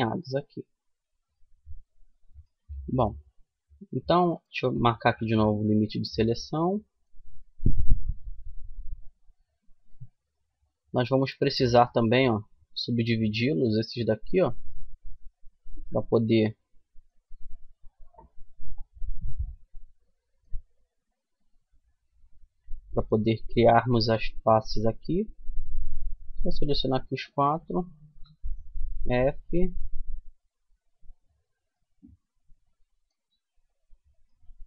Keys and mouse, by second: 2.0 a, 3.7-5.3 middle drag, 6.0 middle click, 7.1-11.6 middle drag, 12.9 middle click, 16.2-22.0 middle drag, 24.4-25.9 right drag, 27.1 f, 27.8-29.9 middle drag, 31.0 middle click, 33.5 click, 34.0-34.6 middle drag.